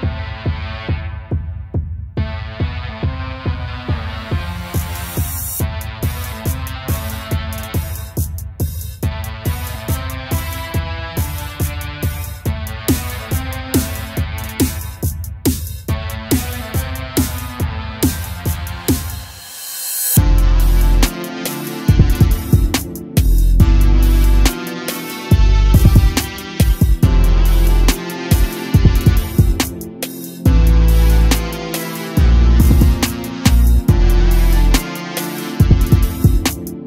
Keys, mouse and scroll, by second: 3.4-3.9 scroll down 1, 3.9 a, 4.1 a, 4.4-5.0 scroll up 2, 5.0-6.4 scroll up 1, 6.4-7.7 scroll up 3, 7.7 click, 8.5-10.1 middle drag, 10.1 a, 10.3 a, 10.4-11.0 scroll down 1, 11.0-11.7 shift+middle drag, 11.7 click, 12.5-13.6 middle drag, 13.6 click, 18.1 click, 21.5 a, 21.7 a, 21.9-23.1 scroll down 3, 23.1 shift+a, 24.7 shift+a, 27.5-28.3 scroll up 2, 28.4 g, 30.9 click, 34.0 click, 35.3 click.